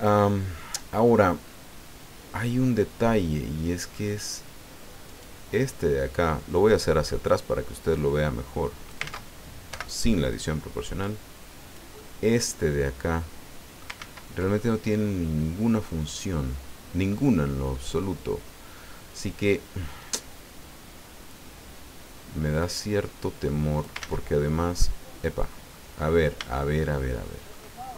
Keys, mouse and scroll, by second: 5.0 right click, 6.5 middle click, 7.9-9.1 drag, 9.0 ctrl+z, 9.7 o, 10.3-11.9 drag, 11.9-14.0 middle drag, 14.0 ctrl+z, 14.6-17.3 ctrl+middle drag, 17.6 scroll up 1, 22.6-24.0 drag, 24.0 ctrl+z, 24.8 middle click, 25.7-26.0 scroll up 1, 26.6-27.8 shift+middle drag.